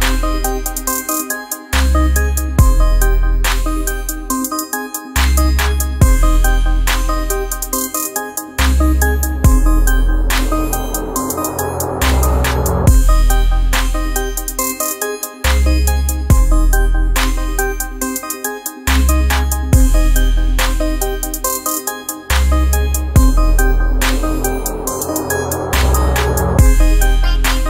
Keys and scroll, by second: 1.8 ctrl+0.